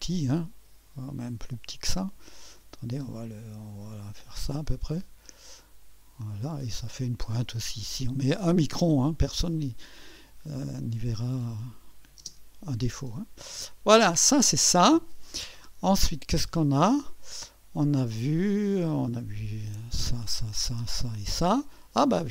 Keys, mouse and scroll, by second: 1.3-2.0 scroll up 1, 2.0-3.2 right drag, 3.2-4.7 drag, 5.3 click, 6.4 scroll down 1, 9.3-10.7 drag, 11.9 click, 13.2 click, 17.0 click, 18.4 click, 19.3 click, 19.8 click.